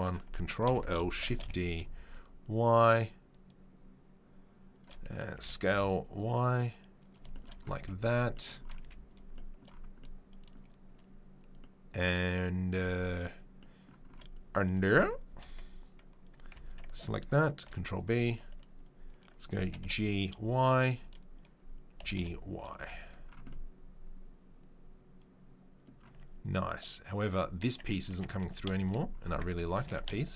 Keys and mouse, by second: 0.6 ctrl+l, 1.1 shift+d, 7.7 z, 8.8 z, 16.6 alt+right click, 16.7-18.7 ctrl+middle drag, 17.6 ctrl+b, 18.7 right click, 18.8-30.3 middle drag, 19.6 g, 22.0 g, 22.7 z, 26.1 Tab, 28.1 Tab, 28.4 a, 29.3 Tab, 29.8 g.